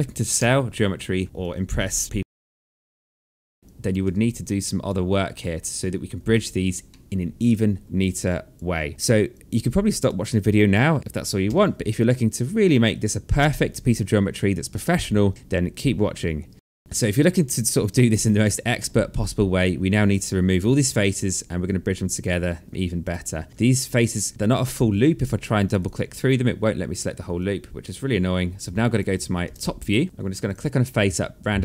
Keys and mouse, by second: 1.2 click, 1.7 alt+middle click, 3.6 alt+click, 3.7 1, 4.0 alt+click, 6.5 alt+middle click, 7.7 alt+middle click, 7.8 alt+click, 8.8 alt+middle click, 8.9 alt+click, 9.8 alt+middle click, 10.3 alt+click, 10.7-11.5 typing, 11.5 alt+middle click, 14.3 alt+middle click, 17.1 alt+middle click, 21.7 alt+click, 24.8 click, 25.2 shift+click, 26.9 alt+click, 29.0 space, 31.1 click.